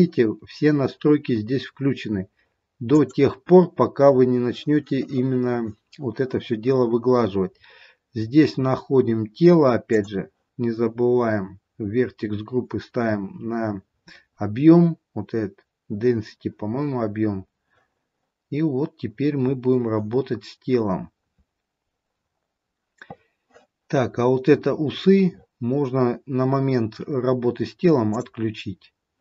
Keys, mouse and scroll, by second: 0.9 scroll down 10, 1.7-2.9 scroll down 7, 2.9 click, 2.9-4.5 scroll down 3, 17.1-17.8 scroll up 1, 21.0-22.4 scroll up 10, 22.4-24.1 scroll down 2, 24.1 scroll down 2, 24.9-28.6 scroll up 14, 28.6 click.